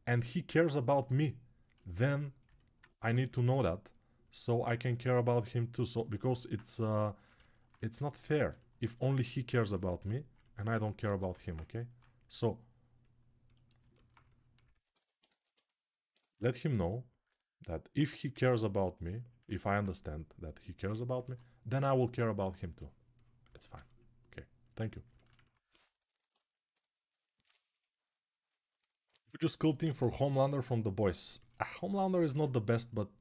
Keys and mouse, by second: 3.0 1, 7.3-8.6 alt+right drag, 10.8 g, 13.5-15.4 alt+shift+right drag, 15.0 1, 17.8 ctrl+z, 18.1 ctrl+z, 21.0 2, 24.0-31.4 shift+right drag, 31.9 g.